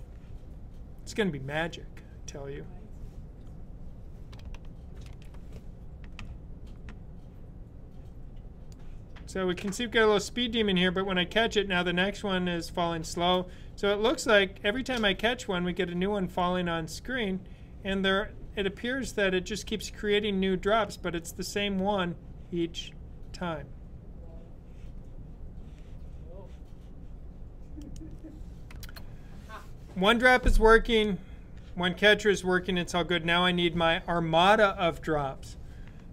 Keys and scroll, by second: 4.9 super+b.